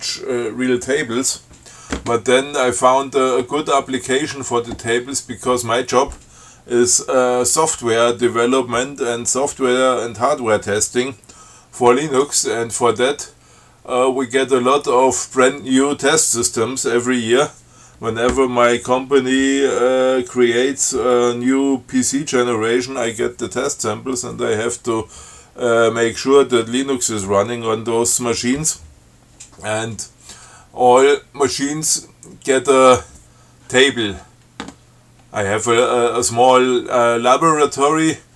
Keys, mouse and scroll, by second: 12.3 click, 32.8 click.